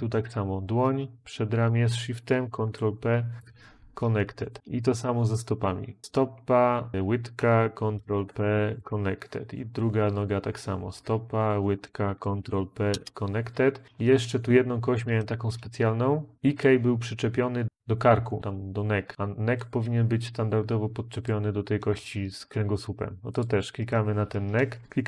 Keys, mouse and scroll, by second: 2.3 ctrl+p, 3.2 Return, 7.8 ctrl+p, 8.6 Return, 12.1 ctrl+p, 12.7 Return.